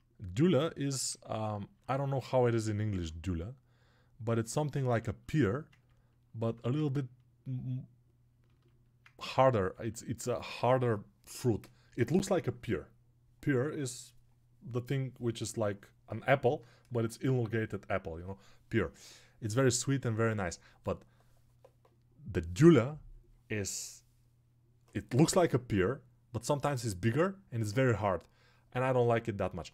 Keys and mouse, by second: 1.6-29.7 drag.